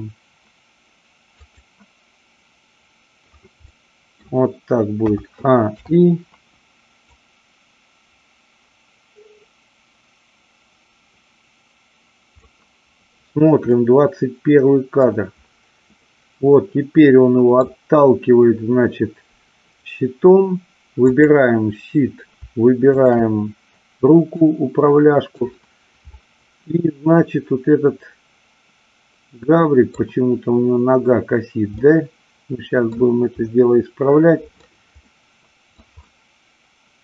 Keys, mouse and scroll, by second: 1.4 click, 3.6 middle click, 5.0 a, 5.7 i, 7.1-12.5 drag, 13.7-15.0 middle drag, 16.0-17.6 middle drag, 21.0 click, 23.0-23.4 shift+drag, 24.4-25.4 middle drag, 26.1-29.9 middle drag, 31.7-33.0 middle drag, 33.4-34.5 middle drag, 35.0-35.7 middle drag, 36.1-37.0 middle drag.